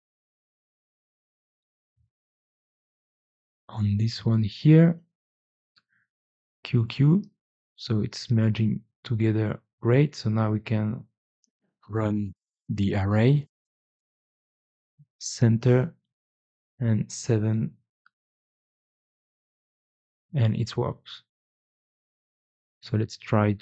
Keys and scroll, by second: 0.3 f, 4.3 4, 6.0 g, 6.3 q, 20.9-21.7 typing, 23.3 q, 23.5 q.